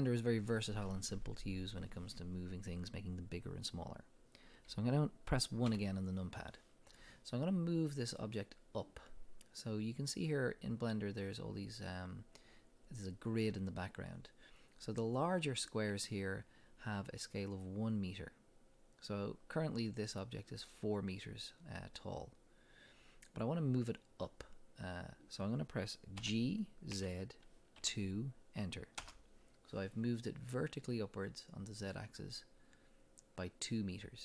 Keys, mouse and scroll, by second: 5.7 KP_1, 9.8-21.8 middle drag, 26.2 g, 29.1 Return, 33.8-34.2 middle drag.